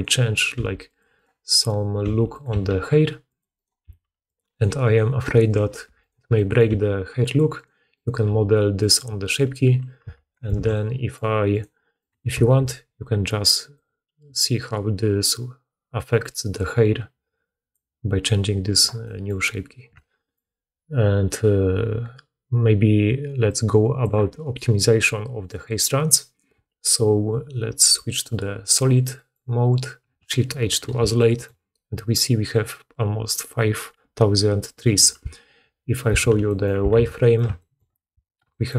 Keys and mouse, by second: 0.4 r, 1.0 click, 1.4 click, 1.9 r, 2.4 g, 3.4 click, 3.7 g, 4.4 click, 4.7 click, 5.1 g, 5.7 2, 5.9 click, 6.6 g, 7.4 click, 8.0-10.9 drag, 8.1 g, 8.9 g, 9.9 Tab, 10.4 alt+a, 11.4 click, 11.9 click, 12.4 alt+a, 13.6-28.1 drag, 25.3 right click, 28.1-30.9 middle drag, 30.6 shift+h, 36.1 alt+q, 36.8 alt+a.